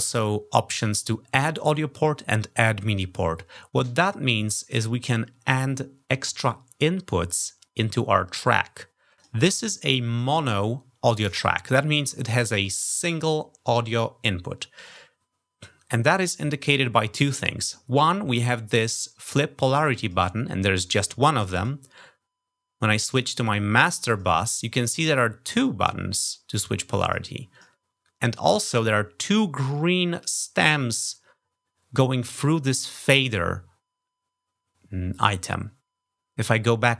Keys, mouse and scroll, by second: 9.0 click, 19.8 click, 21.3 click, 23.9 click, 25.3 click, 26.0 click, 26.8 click, 27.3 click.